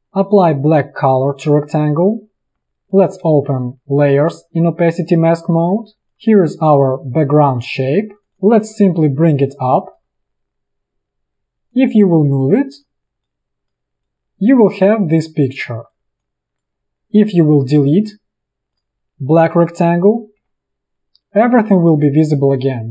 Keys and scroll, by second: 2.5 v, 20.5 Delete.